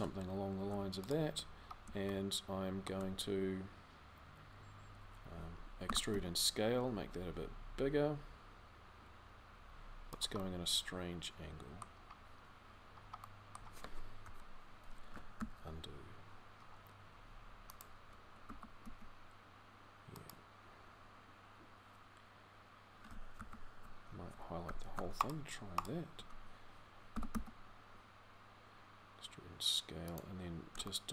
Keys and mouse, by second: 2.3 click, 5.6 e, 10.2 middle click, 10.6 middle click, 13.0 click, 13.2 click, 14.0 KP_3, 15.1 ctrl+z, 18.2 e, 23.1 ctrl+z, 25.1 ctrl+alt+super+z, 30.8 click.